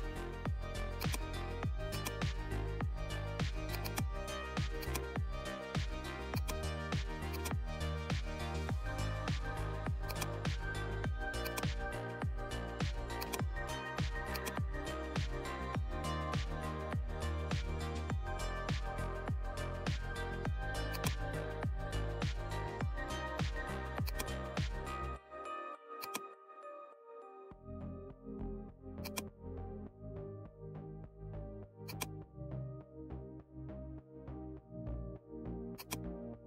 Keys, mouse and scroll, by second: 6.2 click, 10.0-19.8 drag, 19.8 alt+scroll up 1, 20.9-23.0 drag, 23.0 right click, 24.0 click, 25.9-29.0 drag, 29.0-36.4 drag.